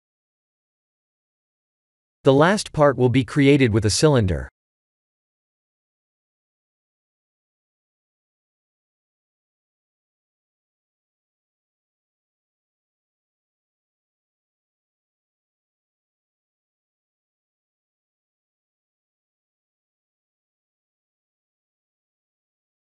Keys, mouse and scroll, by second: 0.0 middle click, 0.1 middle click, 1.6 KP_1, 2.0 KP_3, 2.8 click, 3.3 shift+a, 12.5 KP_1, 13.5 s, 14.7 g, 17.4 middle click, 18.9 Tab, 19.2 3, 19.5 click, 20.3 KP_1, 21.0 shift+z, 21.8 g.